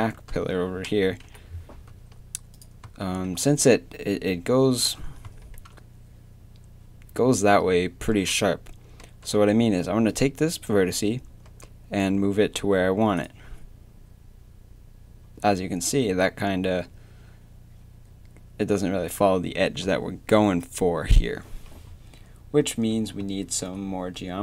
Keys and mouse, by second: 0.3 z, 1.2 KP_7, 1.9 z, 2.5 right click, 9.0 g, 11.5 g, 22.6 a.